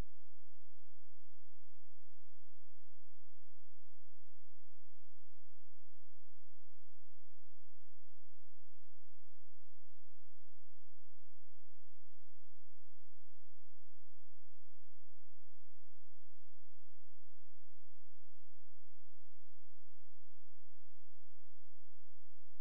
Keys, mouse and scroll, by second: 1.3 click, 5.5 space, 7.6 click, 11.1 click, 14.0 click, 15.5 space, 17.1 click.